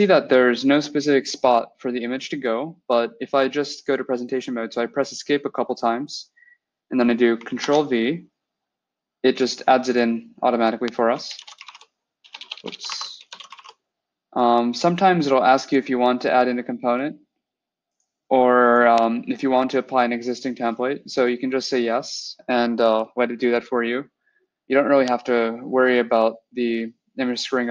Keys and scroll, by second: 7.5 ctrl+v, 11.1-14.0 typing.